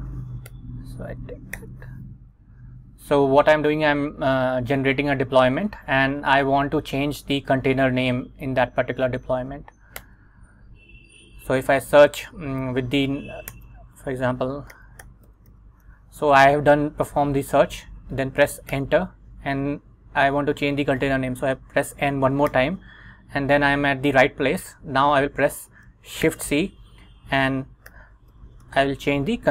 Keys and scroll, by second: 0.6 Return, 1.7 super+v, 2.3 Up, 10.1 Return, 13.6-16.4 typing, 18.8 Return, 22.6 n, 26.4 shift+c, 27.8-29.5 typing.